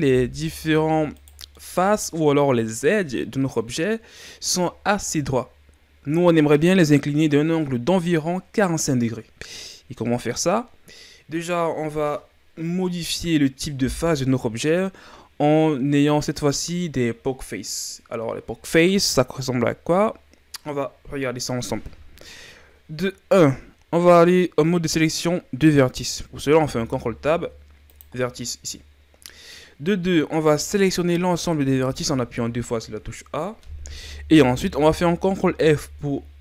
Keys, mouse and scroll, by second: 1.2 right click, 1.5-2.8 middle drag, 2.8-3.4 scroll up 2, 3.4 scroll down 1, 3.6-6.7 middle drag, 26.5 ctrl+Tab, 31.2 a, 31.7 a, 35.2 ctrl+f.